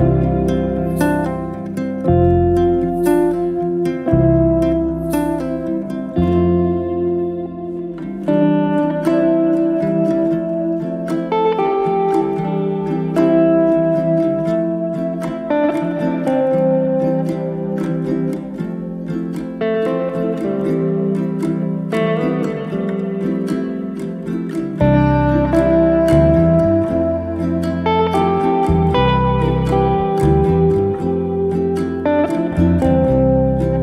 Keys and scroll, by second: 0.3 0, 2.4 Return.